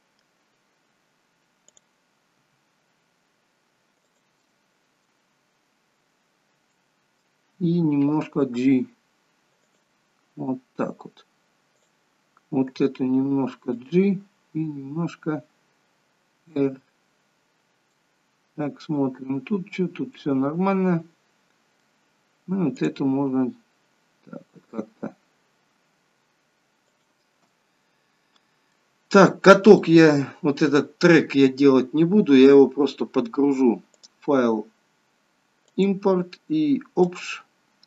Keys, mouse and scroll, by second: 1.8 click, 2.5 r, 4.5 middle click, 5.9 scroll down 1, 6.9 middle click, 8.6 g, 11.8 click, 12.8 g, 14.8 r, 18.1 middle click, 20.3 middle click, 22.8 click, 23.1 r, 27.6 middle click, 29.2 scroll down 2, 29.9 middle click, 34.1 click.